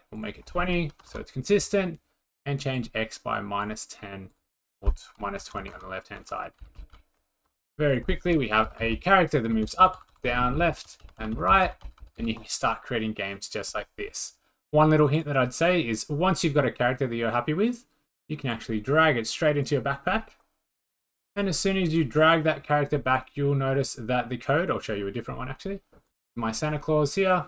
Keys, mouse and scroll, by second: 0.8-1.6 typing, 3.7 click, 4.4 click, 5.1-9.4 typing, 6.7 Down, 6.9 Down, 8.0 click, 9.4 click, 9.5 Down, 9.5 Down, 9.8 Up, 9.8 Up, 9.9 Up, 10.1 Up, 10.2 Left, 10.4 Left, 10.7 Left, 10.7 Right, 10.9 Right, 11.0 Right, 11.2 Right, 11.3 Right, 11.5 Right, 11.6 Right, 12.0 Down, 12.0 Down, 12.2 Down, 15.2 click, 19.6-21.8 drag, 23.2-25.2 drag, 26.1-27.4 drag.